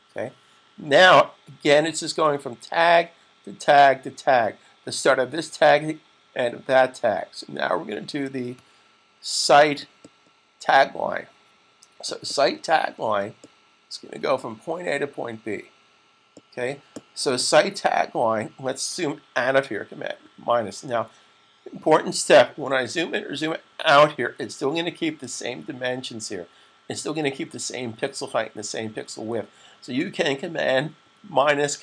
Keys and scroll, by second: 20.1 super+-, 23.5 super+=, 24.3 =, 24.8 =, 27.0-28.2 typing.